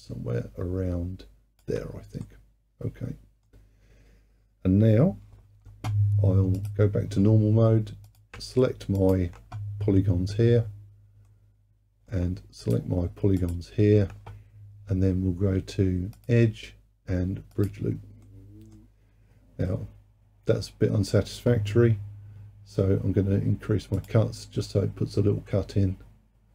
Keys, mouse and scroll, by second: 2.3-5.3 middle drag, 6.6-8.2 drag, 9.0 shift+click, 9.9-10.3 scroll up 2, 10.3-11.3 scroll down 2, 11.3-12.7 middle drag, 12.7 shift+click, 13.5 shift+click, 16.2-18.3 drag, 18.3-21.3 middle drag, 24.0-25.5 drag, 25.5-26.5 middle drag.